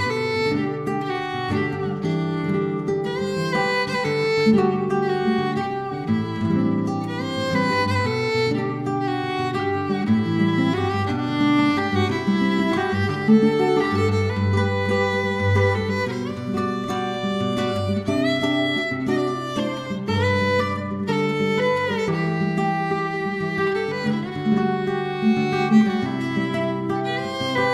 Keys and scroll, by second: 1.0 ctrl+d, 1.0 End, 1.3 Escape, 2.5 ctrl+d, 2.7 F2, 2.8 BackSpace, 2.9 5, 10.3 ctrl+d, 10.4 F2, 10.4 BackSpace, 10.6 6, 13.4 0, 13.6 Tab, 13.7 ., 13.8 Return.